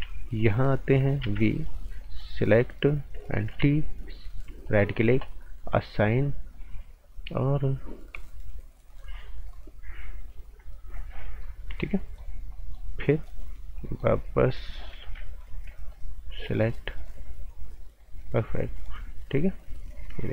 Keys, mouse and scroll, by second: 0.4 click, 1.2 b, 1.6 click, 2.0 right click, 2.4 click, 3.5 t, 4.0 click, 4.6 alt+right click, 5.8 click, 10.3 click, 11.4 right click, 15.0 z, 15.5 scroll down 1, 15.7 right click, 16.4 click, 18.2 right click, 18.7 click.